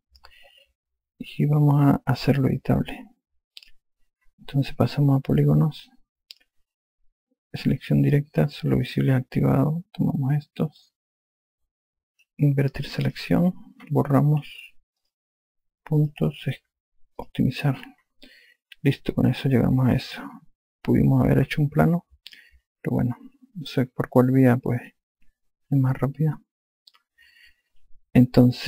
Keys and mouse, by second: 4.3 click, 6.1 click, 8.3 4, 9.8 click, 13.8 click, 15.1 Delete, 15.7 click, 17.9 click, 20.2 alt+click, 23.3 alt+click, 26.6 alt+click.